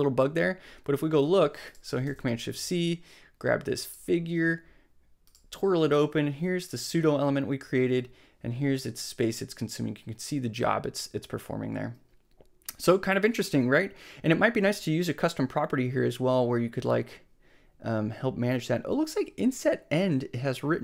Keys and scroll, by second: 2.0 shift+super+c.